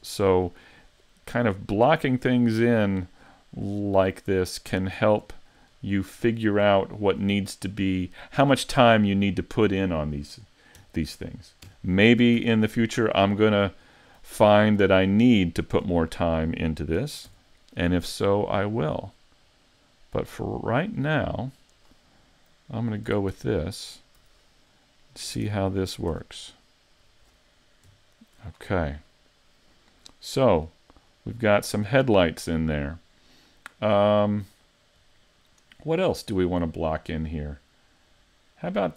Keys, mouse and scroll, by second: 0.3 shift+middle click, 3.7 middle click, 5.0 right click, 5.7-6.3 scroll up 4, 6.3-6.9 scroll down 1, 6.9 scroll down 1, 7.1 shift+right click, 7.9 right click, 8.4-8.9 scroll down 3, 8.9 middle click, 10.8 KP_1, 11.7 KP_5, 12.4 z, 12.9-14.0 scroll up 4, 13.4 shift+middle click, 14.0 scroll up 1, 14.4 shift+middle click, 17.0 shift+d, 21.8 click, 23.1 a, 23.3 Tab, 24.2 z, 24.7 middle click, 26.1 Tab, 26.6 middle click, 27.1-27.4 scroll down 1, 27.9 KP_5, 28.6-29.1 scroll down 6, 29.1 middle click, 30.7-31.1 scroll up 2, 31.1 middle click, 33.7-35.2 scroll down 5, 35.2 middle click, 35.9-36.4 scroll down 2, 36.4 middle click, 37.3-37.9 scroll down 2, 38.0 middle click.